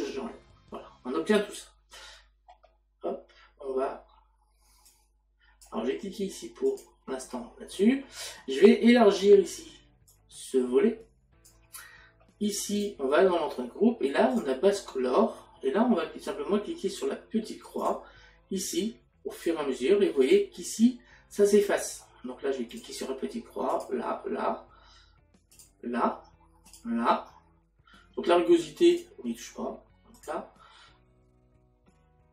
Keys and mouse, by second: 0.6 click, 6.7 click, 12.8 click, 14.3 click, 17.8 click, 19.4 click, 25.6 click, 26.7 click, 28.9 click, 30.1 click.